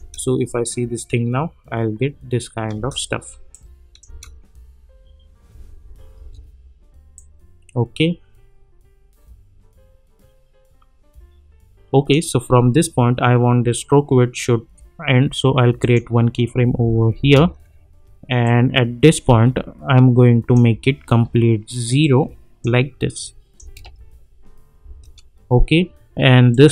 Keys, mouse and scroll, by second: 2.7 space, 3.5-4.1 click, 4.0 space, 7.1-12.1 drag, 16.6 space, 18.4-20.6 drag, 23.6 space, 26.5 click.